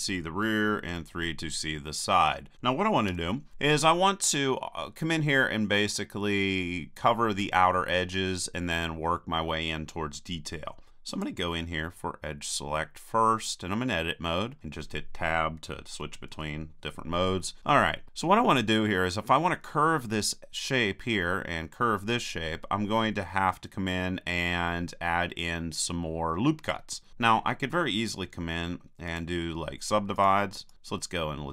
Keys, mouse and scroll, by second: 0.9 KP_3, 3.1 KP_1, 11.1-13.1 drag, 13.1-16.0 middle drag, 16.0 Tab, 16.3 Tab, 29.1-30.7 drag, 30.2-31.5 right drag.